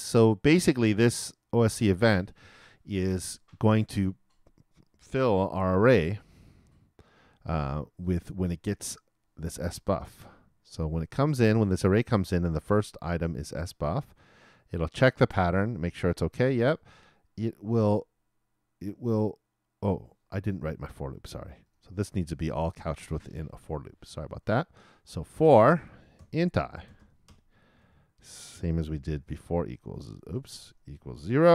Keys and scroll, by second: 5.4 super+t, 25.8-26.9 typing, 29.4 shift+\, 29.6 shift+=, 30.4 shift+BackSpace.